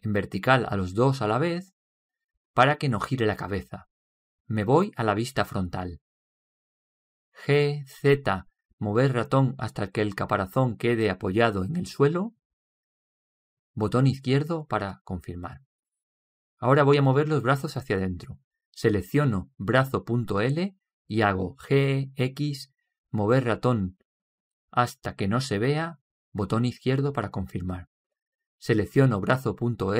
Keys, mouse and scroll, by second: 0.0 right click, 7.1 KP_1, 9.4 g, 16.9-18.8 middle drag, 20.6 right click, 22.8 g.